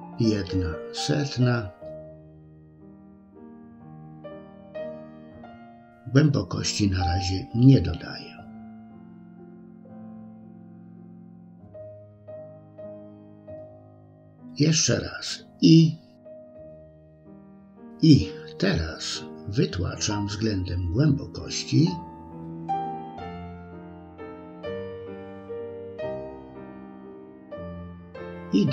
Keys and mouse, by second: 2.9-6.1 drag, 15.2-20.8 drag, 21.7-23.3 middle drag, 27.7-28.7 drag.